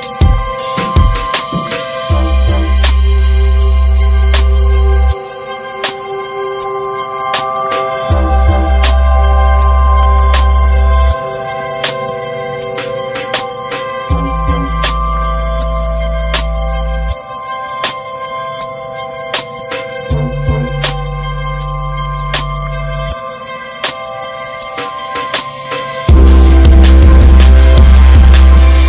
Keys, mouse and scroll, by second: 0.6 click, 2.7 1, 2.9 click, 3.8 click, 4.8 click, 7.0 shift+middle click, 7.5 click, 8.3 click, 9.6 shift+middle click, 10.0 click, 10.8 click, 11.7 click, 14.2 click, 14.8 click, 15.3 shift+middle click, 15.9 click, 16.8 click, 17.7 click, 18.5 click, 19.9 click, 20.4 Tab, 20.6 alt+z, 20.7-21.1 alt+scroll down 3, 21.1 middle click, 21.5 Tab, 21.7 middle click, 21.9 scroll up 1, 22.3 3, 22.7 click, 23.1 alt+middle click, 23.8 shift+middle click, 23.9 shift+scroll up 2, 24.3 s, 28.4 2, 28.5 click.